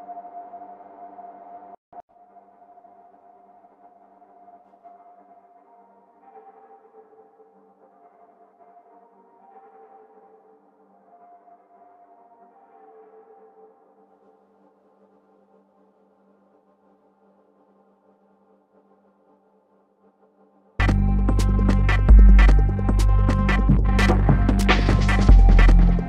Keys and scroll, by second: 23.2 BackSpace, 25.3 super+BackSpace.